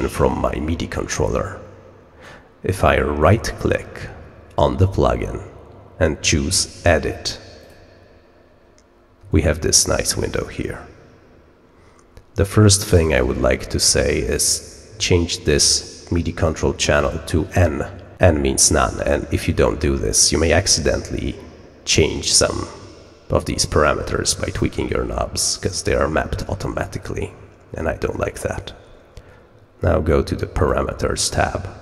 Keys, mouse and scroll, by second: 3.1 right click, 7.5 click, 16.9 click, 30.5 click.